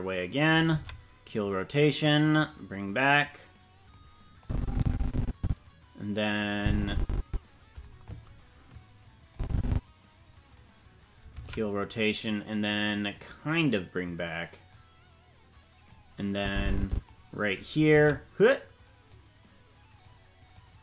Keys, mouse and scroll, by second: 0.7 alt+r, 1.9-3.9 drag, 4.4-6.3 drag, 6.5 click, 9.3-10.5 drag, 13.1-14.1 drag, 14.7-15.9 drag, 16.3 click, 19.0-20.0 drag, 20.5 click.